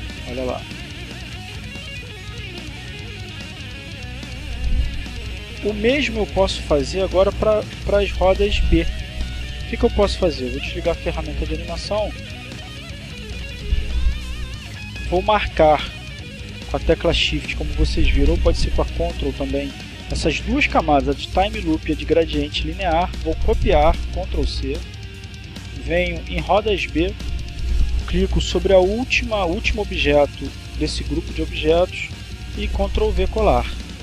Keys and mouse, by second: 4.4 click, 7.6 click, 9.4 click, 10.5 click, 12.0 click, 13.8 shift+click, 18.0-19.1 drag, 23.2 ctrl+c, 25.0 click, 25.8 click, 26.5 click, 32.7 ctrl+v.